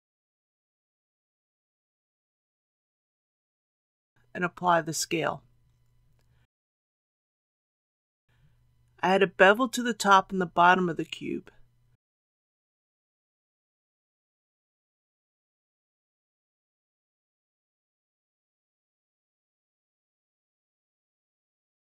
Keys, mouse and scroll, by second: 2.0 click, 4.6 ctrl+a, 6.0 click, 10.8 Tab, 11.8 Tab, 12.4 middle click, 14.0 click, 14.7 shift+click, 15.3-15.6 scroll up 1, 16.2 middle click, 17.3 shift+middle click, 18.6 shift+click, 19.6 shift+click, 20.1 scroll down 1.